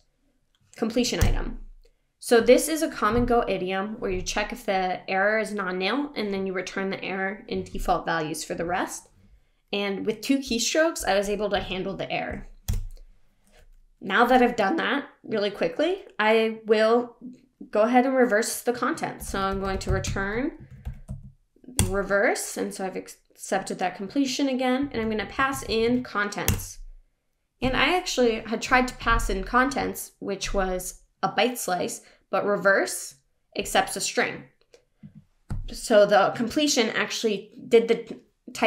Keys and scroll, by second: 1.2 Return, 21.8 Return, 26.5 Return.